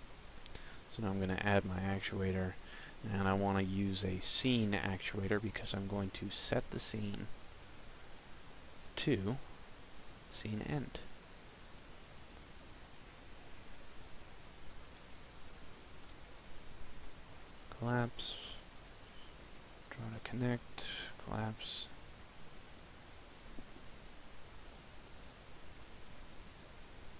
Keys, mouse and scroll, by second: 1.8 click, 9.4 middle click, 9.4 click, 20.9 click, 21.3 middle click, 22.6 scroll down 2, 24.2 KP_0, 25.0 KP_0, 26.5 p.